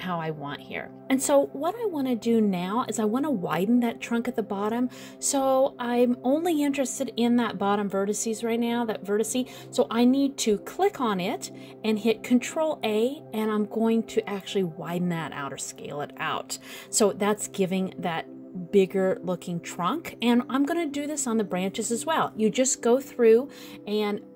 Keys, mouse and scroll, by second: 0.0 alt+a, 10.3 click, 11.9 click, 13.0 ctrl+a, 19.4 scroll down 1, 19.5 middle click, 20.9-21.6 scroll up 1, 21.6 click, 22.1 middle click, 23.6 ctrl+a.